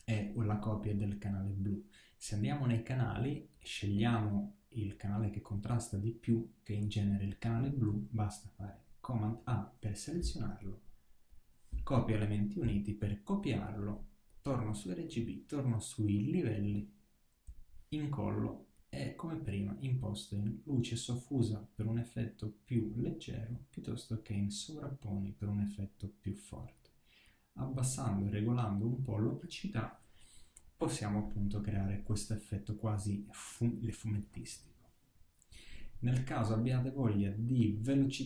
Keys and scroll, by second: 7.9 super+a, 17.3 super+v.